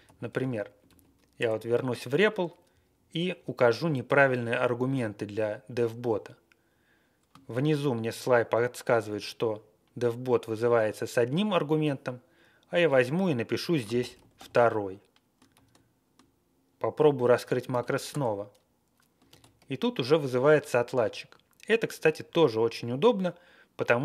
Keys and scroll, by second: 0.0-1.4 typing, 1.4 Return, 2.6 Home, 2.9 Left, 3.3 Right, 4.2 ctrl+e, 4.5 Left, 6.5 ctrl+e, 12.8-14.8 typing, 15.5 ctrl+a, 17.7 ctrl+c, 18.1 Return, 19.3 ctrl+x, 19.6 ctrl+c, 20.3 Page_Down, 20.5 Page_Down, 20.6 Page_Down.